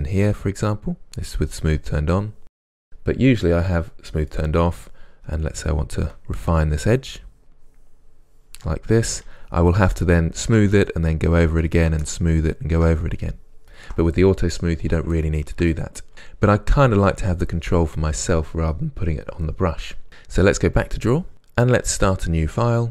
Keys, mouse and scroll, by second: 4.4-5.4 middle drag, 5.4-15.1 ctrl+drag, 15.1-20.9 ctrl+middle drag, 20.9 click, 21.3-22.8 middle drag, 22.8 click.